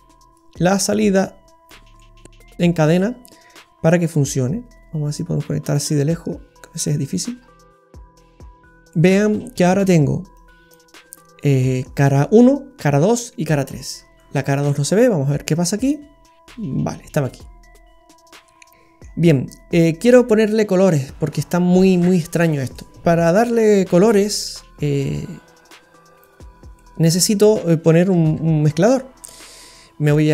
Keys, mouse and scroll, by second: 0.3 click, 2.0 middle click, 2.9-3.3 scroll down 5, 5.2 click, 7.3 scroll down 2, 7.5 middle click, 8.0-8.9 scroll up 10, 8.9 middle click, 9.4-10.2 scroll up 3, 10.4 click, 11.4 middle click, 14.0 scroll down 3, 14.2 middle click, 14.9-15.3 scroll up 5, 15.9 click, 18.7 middle click, 18.7-19.2 scroll up 3, 22.0-22.7 scroll up 4, 22.7 middle click, 23.8-25.3 scroll up 7, 24.4 middle click, 25.7 click, 26.5-26.9 scroll down 2, 26.7 middle click, 28.3 shift+a.